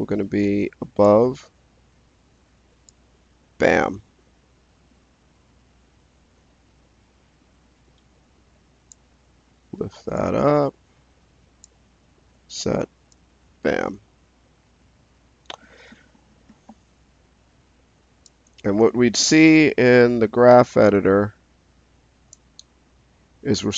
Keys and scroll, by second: 2.2 s, 12.2 s, 18.6 space.